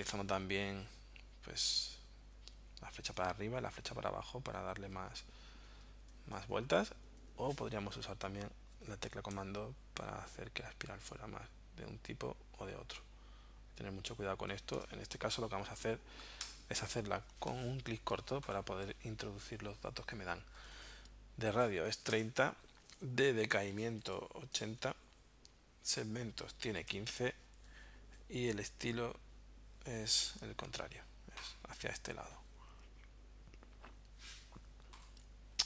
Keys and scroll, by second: 1.7 Up, 3.2 Down, 4.8 Up, 5.9 Down, 6.5 Up, 7.1 Down, 16.4 BackSpace, 21.7-22.6 typing, 23.8-24.6 typing, 24.8 Tab, 26.5 1, 26.9 5, 27.6 Tab.